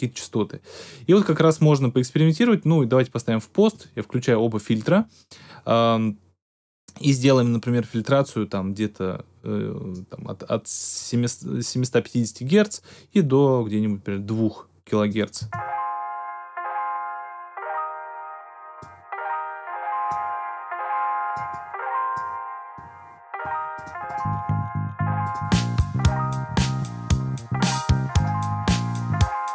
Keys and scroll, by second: 15.3 space.